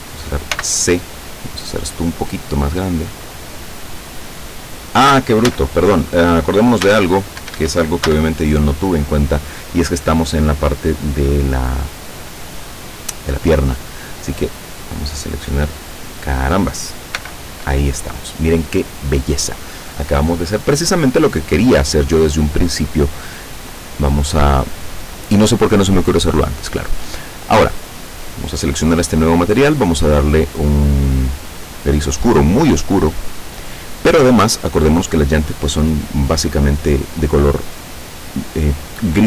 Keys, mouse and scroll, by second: 0.6 c, 1.4-1.9 scroll up 2, 1.9-2.3 scroll down 2, 2.5-2.8 scroll down 2, 3.3-5.1 drag, 5.5 a, 6.9 a, 7.5 Escape, 8.1 a, 14.3 right click, 16.1 right click, 17.2 l, 26.4 click, 28.0 click, 29.6 click, 31.8 click, 33.0 click, 36.0-36.4 scroll down 2.